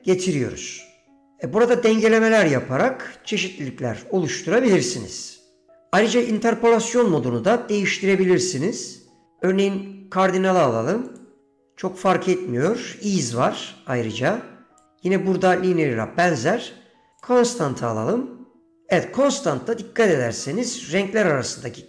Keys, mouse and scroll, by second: 6.4-9.3 drag, 11.2-13.1 drag, 14.9-17.4 drag.